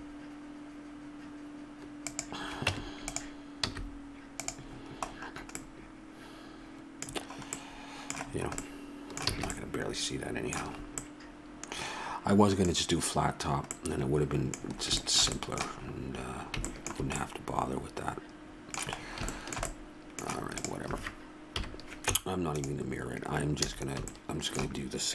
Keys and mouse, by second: 2.7 Tab, 3.6 z, 9.3 a, 16.8-18.6 middle drag, 20.6 click, 21.5 KP_1, 22.1 Tab, 23.7 a.